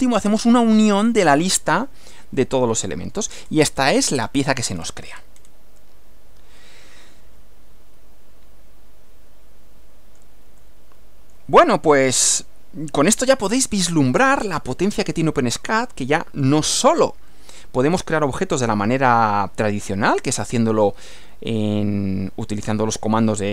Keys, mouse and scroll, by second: 2.4-3.4 middle drag, 3.4-4.0 scroll down 1, 4.2-4.6 scroll up 1, 4.6-5.7 scroll down 2, 5.8-10.4 middle drag, 10.6-12.2 middle drag, 12.2-13.3 middle drag, 14.6-16.6 middle drag, 17.4 middle click, 17.4-18.0 scroll down 1, 20.2 click.